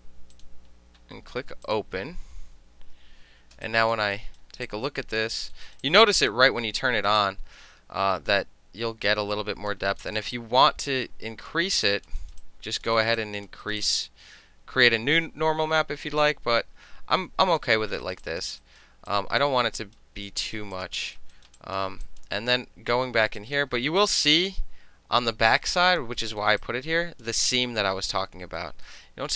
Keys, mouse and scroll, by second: 0.4 click, 1.7 click, 3.7 alt+drag, 4.2 alt+drag, 4.7-5.3 alt+drag, 5.4 alt+middle click, 5.7 alt+right click, 5.9-6.4 alt+drag, 6.4 alt+middle click, 6.7 alt+middle click, 6.9 alt+right click, 7.3-9.8 alt+drag, 9.8 alt+middle click, 10.1-10.4 alt+middle drag, 10.2 alt+click, 10.4-11.6 alt+drag, 11.6-11.9 alt+middle drag, 11.9 alt+drag, 12.1 alt+middle click, 12.3 alt+right click, 12.4 alt+middle click, 12.5 alt+click, 12.9 alt+middle click, 13.0 alt+right click, 13.1 alt+middle click, 13.2 alt+drag, 13.5 alt+middle click, 13.7 alt+right click, 13.8 alt+middle click, 13.9-15.5 alt+drag, 15.5 alt+middle drag, 15.7-17.4 alt+drag, 17.4 alt+right click, 17.7 alt+middle click, 18.1 alt+click, 18.1 alt+right click, 18.2 alt+middle click, 18.3 alt+right click, 18.4 alt+click, 18.5 alt+middle drag, 18.7 alt+right click, 18.9 alt+middle drag, 19.2 alt+click, 19.5 alt+middle drag, 19.7-20.0 alt+right drag, 20.0 alt+middle click, 20.3 alt+right click, 20.6 alt+middle click, 20.8 alt+click, 20.9-21.4 alt+middle drag, 21.4 alt+drag, 21.5 alt+middle click, 21.6 alt+drag, 21.8 alt+middle click, 22.1 alt+click, 22.3-23.5 alt+middle drag, 23.5 alt+drag, 23.6 alt+middle click, 23.9 alt+middle drag, 24.1 alt+right click, 24.3 alt+middle drag, 24.5-26.1 alt+drag, 26.1 alt+middle click, 26.5 alt+middle click, 26.7 alt+click, 27.3-28.6 alt+middle drag, 28.9-29.3 alt+middle drag.